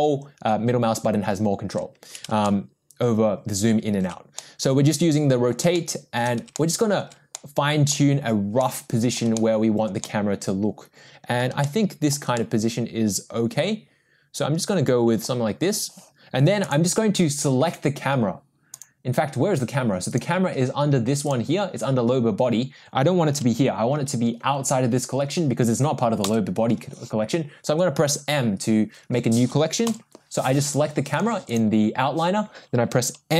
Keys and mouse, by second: 2.4-4.0 ctrl+middle drag, 4.4-5.5 middle drag, 5.7-6.3 shift+middle drag, 6.5-7.0 ctrl+middle drag, 7.3-7.9 middle drag, 8.6 middle click, 9.3-9.9 shift+middle drag, 10.0-11.4 middle drag, 11.6-12.1 shift+middle drag, 12.3-15.2 middle drag, 20.1 click, 26.2 m, 29.9 m, 30.6 click, 31.1 click, 31.5 click.